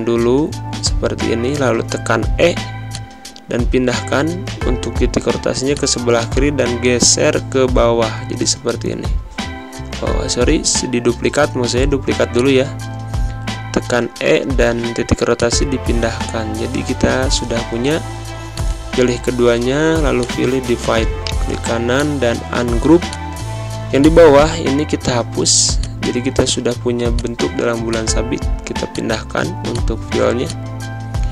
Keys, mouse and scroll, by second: 0.1 v, 0.9 e, 2.8-9.9 drag, 9.9 ctrl+z, 10.7 ctrl+c, 11.1 ctrl+f, 12.2-15.2 drag, 15.4-17.8 drag, 21.1 click, 30.0 z, 30.3 click.